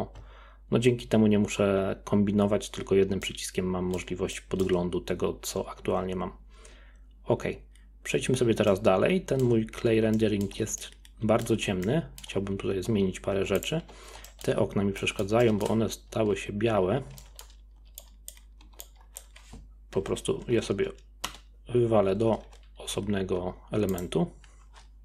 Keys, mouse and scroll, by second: 3.2-7.4 middle drag, 8.7-9.8 middle drag, 9.8-10.1 scroll down 1, 10.1-12.4 shift+middle drag, 12.4-12.8 scroll up 4, 12.8 Tab, 13.5 Tab, 13.6 click, 13.8 Tab, 14.3 shift+middle click, 14.6-15.0 scroll up 6, 15.0 middle click, 15.8-16.1 scroll down 2, 16.1 z, 16.9 scroll down 1, 17.2 middle click, 17.8 b, 18.6 b, 20.4 p, 22.6 Tab, 22.9 z, 23.9 click.